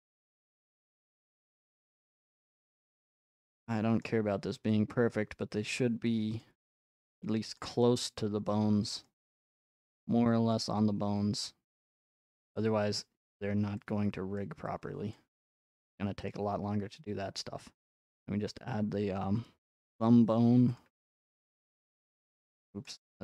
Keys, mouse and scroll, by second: 0.1 scroll up 1, 1.2 click, 2.1 click, 4.0 scroll, 5.1 click, 5.7 click, 7.6-8.8 drag, 9.0 middle click, 10.5-12.6 drag, 10.5 scroll, 12.9-14.4 middle drag, 14.4-16.3 drag, 16.3-18.1 middle drag, 18.1 click, 20.8 click.